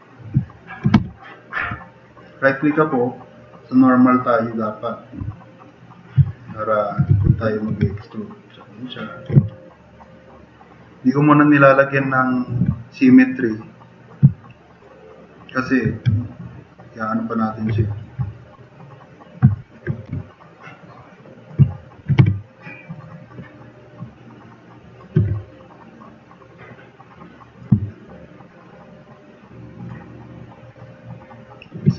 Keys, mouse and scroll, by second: 0.5 click, 0.9 w, 1.6 w, 5.3 w, 7.1 e, 8.2-9.2 drag, 8.2 w, 9.4 click, 11.5 click, 13.2-14.1 drag, 14.3-14.8 drag, 15.0 click, 17.8 click, 18.4 click, 19.5 click, 20.1 t, 20.2-21.4 drag, 22.2 2, 25.3 e, 28.9-29.7 drag, 30.4 drag, 31.3 drag.